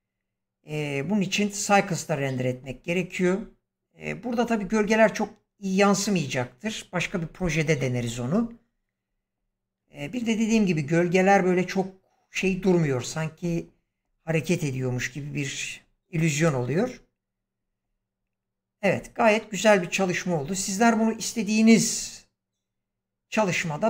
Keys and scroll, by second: 16.3 space.